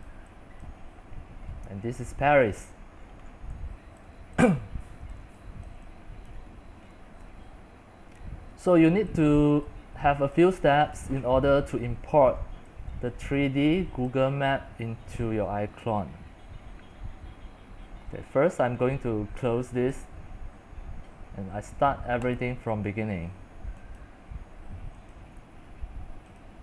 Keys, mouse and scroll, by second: 0.0-0.7 typing, 1.2 scroll, 1.3 scroll, 1.6 scroll, 1.7 scroll, 1.8 scroll, 2.0 scroll, 2.1-3.6 middle drag, 4.1-5.9 typing, 5.8 click, 9.2 x, 9.9 c, 10.2 c, 11.3-12.5 middle drag, 12.5-13.8 typing, 14.1-19.3 drag, 20.0-26.6 drag.